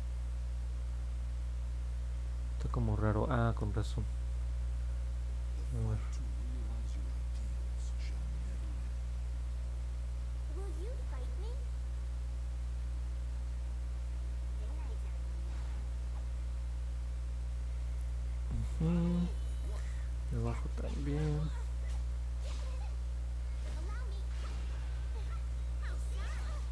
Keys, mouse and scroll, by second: 2.4 ctrl+z, 3.8 click, 6.5-7.9 drag, 21.6 click, 22.3 ctrl+z.